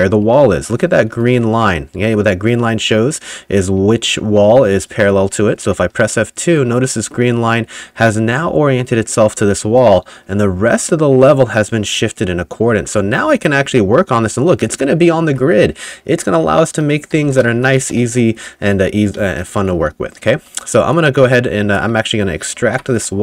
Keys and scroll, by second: 0.0-1.9 typing, 5.3 F2, 15.4 F5, 16.9-20.4 typing, 22.6 alt+n.